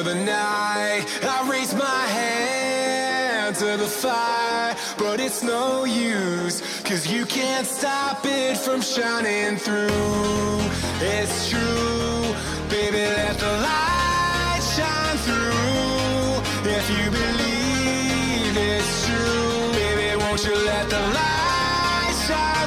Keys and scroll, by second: 7.6 ctrl+alt+z.